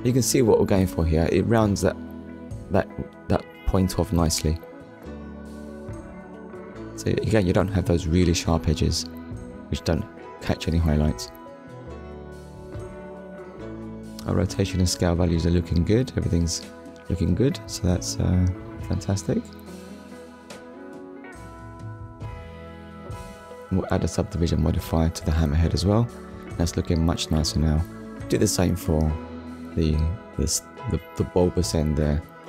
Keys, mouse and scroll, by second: 3.7 shift+middle click, 6.0 Tab, 6.9 click, 7.4 scroll down 1, 8.0-8.4 scroll down 2, 8.7 middle click, 9.6 shift+middle click, 15.8 middle click, 18.7 click, 20.4 click, 21.8 click, 23.8 click, 24.9 middle click, 25.8 click, 26.7 click, 27.2 shift+middle click, 28.5-28.9 scroll up 1, 30.8 middle click, 32.2 click.